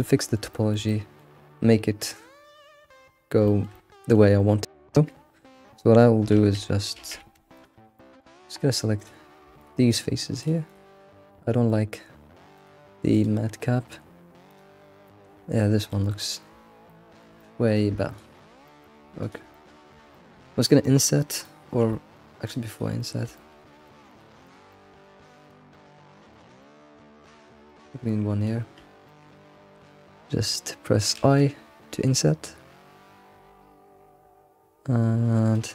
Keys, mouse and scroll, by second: 0.0-4.4 middle drag, 4.4-5.5 scroll up 1, 5.5 scroll down 2, 5.8 middle click, 6.3 alt+x, 7.0 alt+x, 7.2 Tab, 7.5 click, 7.8 scroll down 1, 7.9-9.0 middle drag, 9.0 click, 9.6 ctrl+click, 10.4 ctrl+click, 10.7 ctrl+click, 11.7-12.5 middle drag, 12.5-15.0 drag, 15.0-18.1 middle drag, 17.5 click, 18.4 shift+middle click, 19.2 ctrl+click, 19.5-22.4 middle drag, 22.4 shift+click, 22.7 ctrl+shift+click, 23.0 middle click, 23.8 ctrl+click, 24.1 ctrl+click, 24.4 ctrl+click, 24.7 middle click, 25.5 ctrl+click, 25.7 middle click, 26.3 ctrl+click, 26.6-28.4 middle drag, 28.4 shift+click, 29.0-31.2 middle drag.